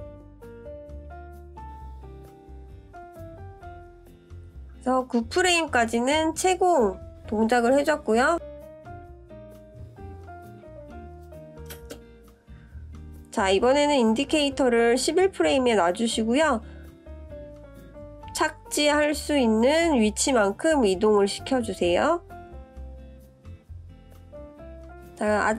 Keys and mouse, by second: 5.6-6.2 drag, 6.9 click, 7.6 click, 9.1-9.8 drag, 11.3 click, 12.9-14.5 drag, 15.7-16.0 shift+drag, 18.3 click, 20.5 click.